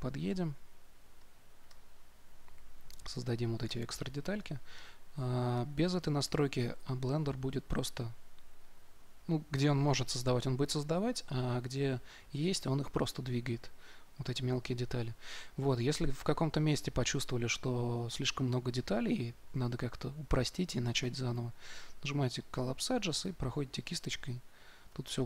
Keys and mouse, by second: 0.3 middle click, 1.2 right click, 1.6-5.4 drag, 6.2-8.0 drag, 21.2-25.2 drag.